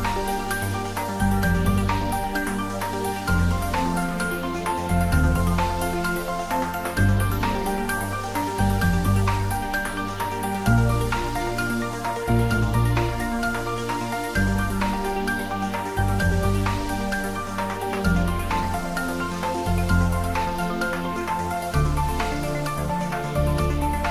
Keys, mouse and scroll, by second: 15.4 shift+click, 21.8 shift+click, 22.9 shift+click.